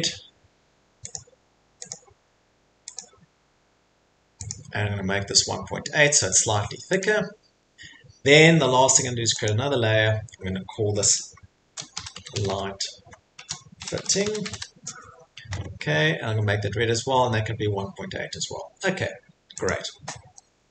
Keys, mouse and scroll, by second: 1.1 click, 1.9 click, 2.9 click, 4.5 click, 6.3 click, 7.0 click, 9.4 click, 11.4-15.0 typing, 19.7 click.